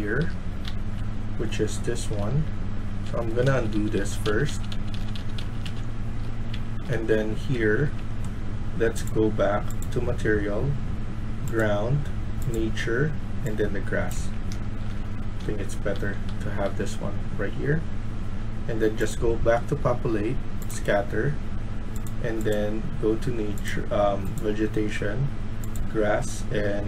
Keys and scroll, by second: 0.0-0.1 typing, 1.8-2.7 typing, 3.4 ctrl+z, 3.6 ctrl+z, 6.4-8.1 typing, 14.1-16.2 typing.